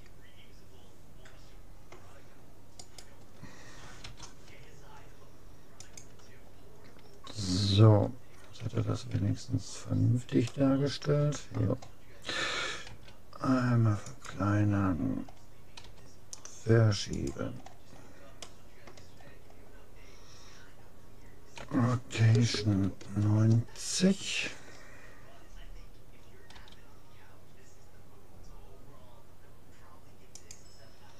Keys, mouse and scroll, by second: 2.9-4.7 right drag, 4.0 u, 8.6 a, 9.1 a, 10.5-12.1 middle drag, 12.9 s, 14.9-16.9 middle drag, 15.9 g, 17.7 middle click, 18.5-19.9 scroll up 1, 19.9-21.3 middle drag, 21.6 r, 26.5 g.